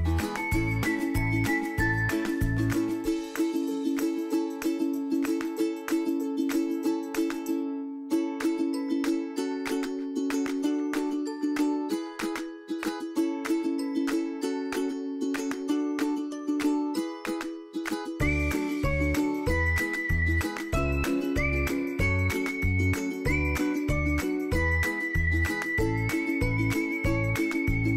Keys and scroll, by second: 5.6 ctrl+d, 11.4 ctrl+d, 16.4 ctrl+d, 17.0 ctrl+d, 22.0 ctrl+d, 26.2 ctrl+d, 27.0 ctrl+d.